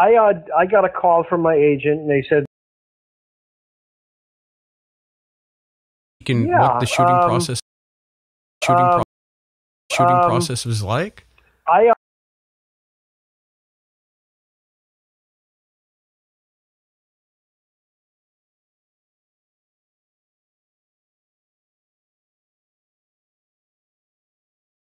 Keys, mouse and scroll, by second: 0.4 click, 1.0 click, 2.1 click, 2.4 space, 3.2-4.3 drag, 5.1 click, 6.0 click, 6.1 space, 7.5 space, 8.2 click, 8.5 space, 8.9 space, 9.1 click, 9.8 space, 10.0-11.9 drag, 11.9 space, 12.7 Delete, 13.0 click, 13.4 click, 13.9-16.4 drag, 18.5 click, 19.5 click, 20.7 click, 22.1 click, 23.1-24.8 drag.